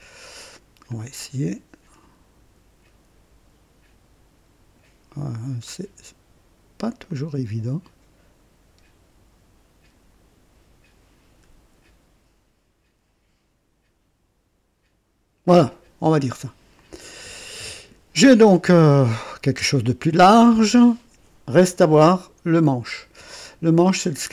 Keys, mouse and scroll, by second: 0.8-4.9 drag, 7.0-15.5 drag, 16.7 click, 18.1-20.9 drag, 22.5 click, 24.0 click.